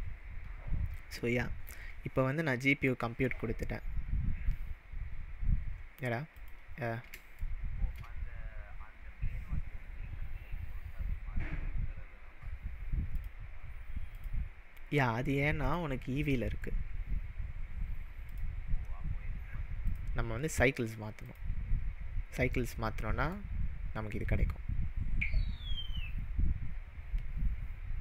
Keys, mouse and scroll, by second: 1.1-1.7 middle drag, 6.3 click, 7.4-7.9 shift+middle drag, 13.1 click, 14.1 click, 15.6-18.4 drag, 19.9-22.6 drag, 22.6-23.5 middle drag, 24.2-26.0 scroll up 2, 26.0-26.3 scroll up 1.